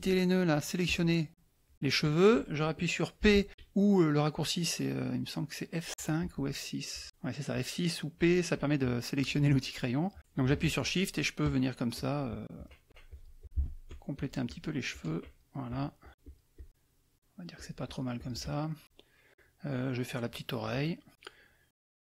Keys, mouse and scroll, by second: 0.8 click, 3.2 p, 6.2 F6, 6.9 F6, 9.8 middle click, 11.9 shift+click, 14.1 shift+click, 14.9 shift+click, 15.7 shift+click, 16.2 shift+click, 17.5 shift+click, 18.8 middle click, 19.9 middle click.